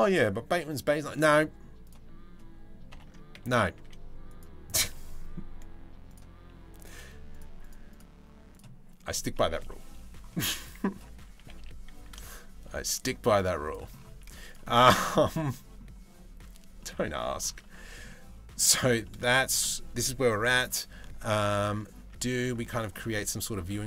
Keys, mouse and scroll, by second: 1.0 middle click, 2.5 ctrl+l, 2.9 KP_3, 3.3 z, 7.2 right click, 8.1-9.1 right drag, 9.1 KP_1, 11.0 g, 13.8 z, 14.3 middle click, 15.0 Tab, 15.1 middle click, 16.4 middle click, 17.2 Tab, 17.7 middle click, 18.3 a, 18.6 middle click, 19.0 shift+middle click, 19.3 middle click, 20.6 middle click, 21.4-22.5 middle drag.